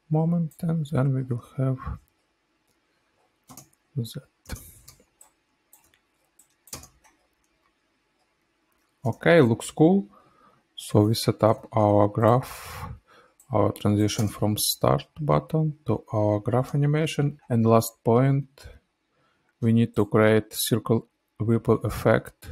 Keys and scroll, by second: 3.5 space, 4.8 space, 6.6 space, 9.4 -, 9.5 -, 9.7 -, 11.4 ctrl+a, 14.1 space, 16.6 space, 17.0 -.